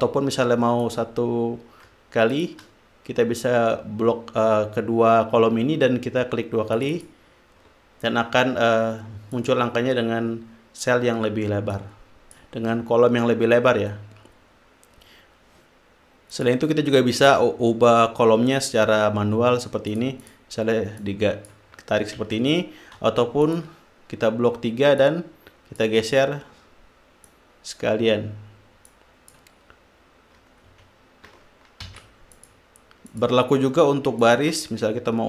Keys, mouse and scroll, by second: 1.2 click, 2.7 shift+click, 7.1 click, 9.7 click, 12.1 click, 16.7 click, 17.6 shift+click, 20.3-20.9 drag, 21.4 click, 22.6 ctrl+z, 23.8 shift+click, 25.4 click, 27.6 click, 29.2 click, 32.2 ctrl+z, 32.7 ctrl+click, 33.5 click, 34.6 shift+click.